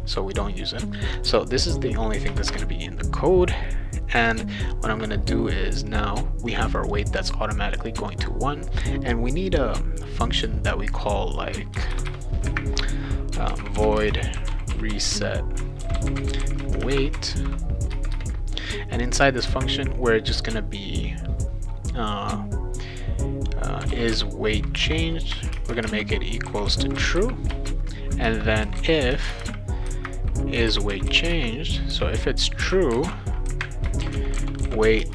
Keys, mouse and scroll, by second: 1.2 click, 1.7 click, 2.3 Return, 2.5 Return, 5.9 click, 6.5 click, 6.7 click, 8.0 click, 8.2 click, 11.0 click, 11.7 Return, 11.8 Return, 12.1 Return, 13.2-17.7 typing, 17.9 Return, 23.5-31.6 typing, 24.8 Return, 28.2 Return, 32.9-35.1 typing.